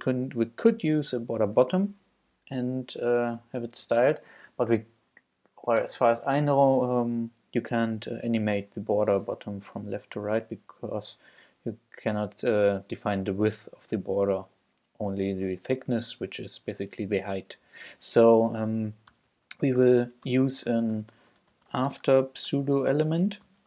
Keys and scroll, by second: 18.9-23.6 typing, 22.8 shift+Return.